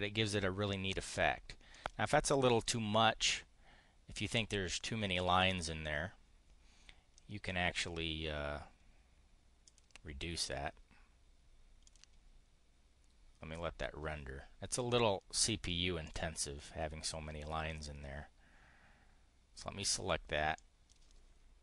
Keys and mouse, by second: 1.7 click, 5.1 click, 7.1 click, 9.6 click, 11.8 click, 15.9 click, 20.5 click.